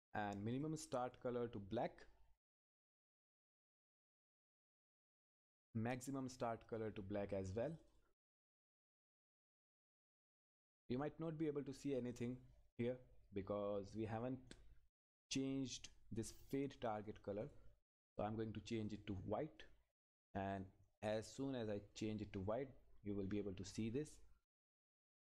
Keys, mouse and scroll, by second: 0.5 click, 12.0-13.8 scroll up 1, 14.0 click, 21.7-22.3 scroll up 1, 24.1 scroll down 1.